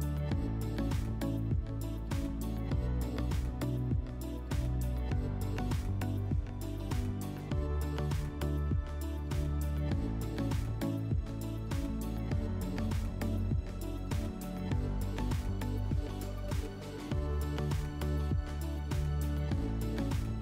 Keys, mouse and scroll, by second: 0.0-1.6 drag, 2.2-4.7 drag, 5.5-6.7 right drag, 6.7-9.7 drag, 11.7-16.1 drag, 18.8-20.4 drag.